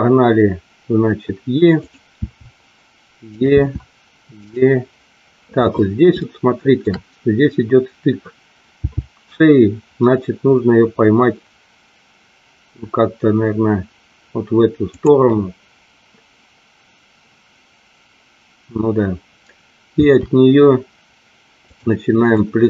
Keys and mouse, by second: 1.8 click, 2.2 e, 3.3 click, 3.4 e, 6.2 shift+middle click, 8.7 g, 20.0 e, 21.6 click, 22.3 click.